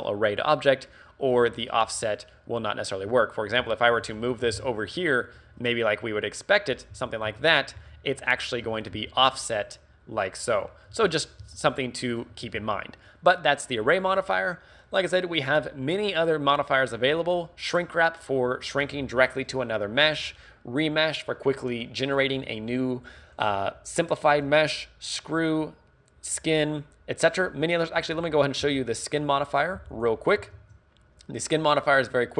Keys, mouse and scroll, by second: 3.1 Tab, 3.6 g, 4.0 right click, 4.1 a, 4.2 a, 4.5 g, 6.9 click, 7.0 z, 7.3 Tab, 7.8 z, 8.7 h, 8.9 z, 10.9 alt+h, 11.4 z, 11.8 middle click, 12.3 a, 12.6 z, 12.7 middle click, 14.1 right click, 15.9 click, 28.0-28.3 scroll down 4, 28.3 scroll up 4, 28.7 x, 29.5 right click, 29.8 x, 30.6 shift+a.